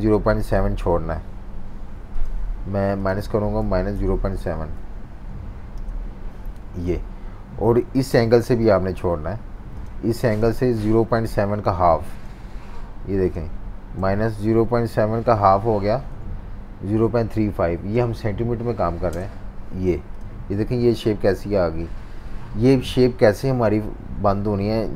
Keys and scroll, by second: 3.3-4.8 typing, 14.0 -, 15.0-16.6 typing, 19.1 Return.